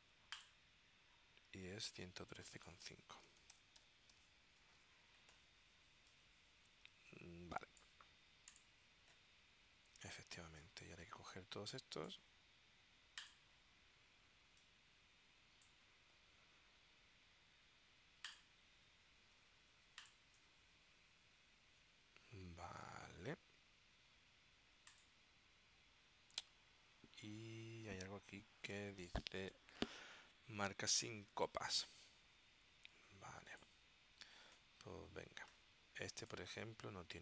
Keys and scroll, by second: 3.2-4.7 typing.